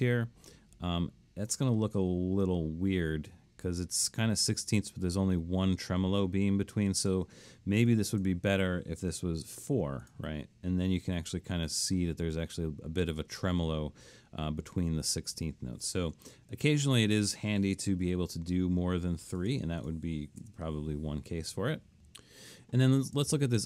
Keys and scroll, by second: 9.2 4, 18.1 3, 20.4 BackSpace.